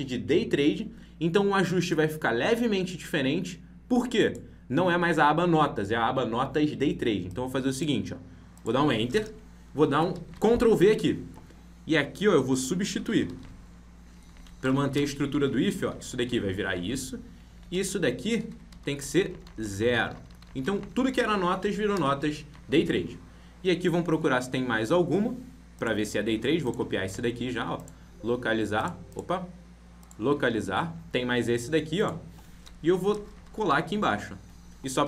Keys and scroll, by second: 10.2 ctrl+v, 13.3 ctrl+x, 16.2 ctrl+v, 18.8 ctrl+Right, 27.0 ctrl+c, 33.6 ctrl+v.